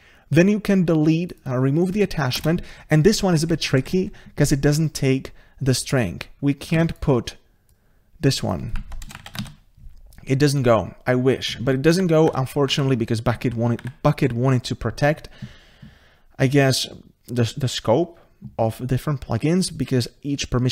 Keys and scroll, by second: 2.9 ctrl+space, 6.9 ctrl+c, 9.4 ctrl+v, 11.9 ctrl+v, 12.3 ctrl+z, 13.8 ctrl+z.